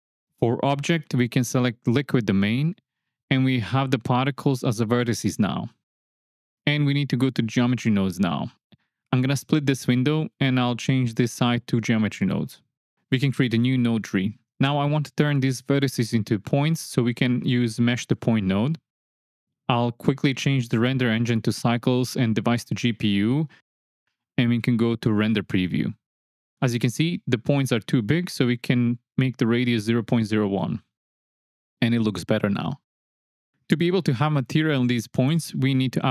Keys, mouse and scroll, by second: 1.4-3.4 drag, 4.6 space, 11.8 t, 12.0-13.0 drag, 14.6 click, 15.3 n, 16.4 shift+a, 21.2 click, 21.9-22.7 drag, 23.5-24.2 drag, 29.9-32.1 drag, 33.5 click, 35.2 shift+a.